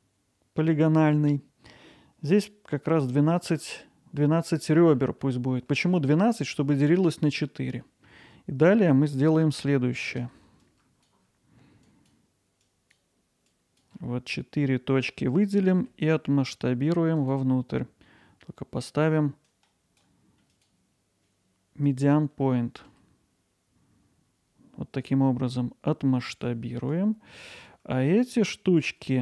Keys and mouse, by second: 4.5-5.0 alt+middle drag, 5.2-5.7 ctrl+alt+middle drag, 5.9 middle drag, 7.8 middle drag, 10.8 click, 12.0 shift+click, 12.8 shift+click, 13.5 shift+click, 17.2-22.0 drag, 26.3 click, 27.0 click.